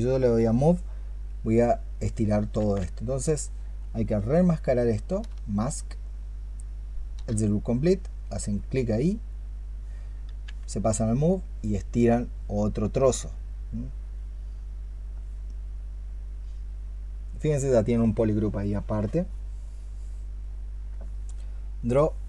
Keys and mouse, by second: 2.4 ctrl+z, 5.1 ctrl+z, 5.6-7.0 space, 10.3 w.